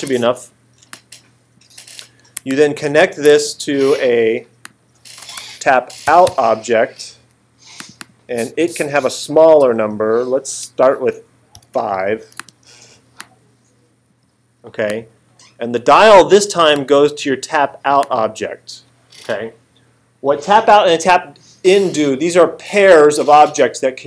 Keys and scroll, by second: 5.2-6.8 typing, 11.6 5.